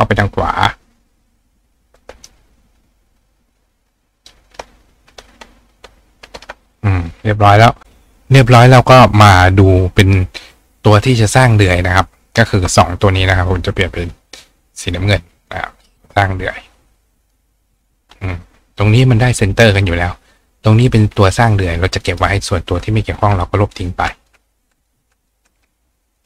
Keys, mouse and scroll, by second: 1.7-4.3 ctrl+drag, 9.4 click, 12.3 shift+click, 14.5 click, 15.4 click, 16.0 shift+click, 17.2 click, 17.8 click, 21.2 click, 22.1 click, 24.2 click, 24.8 click, 25.2 click, 26.1 click.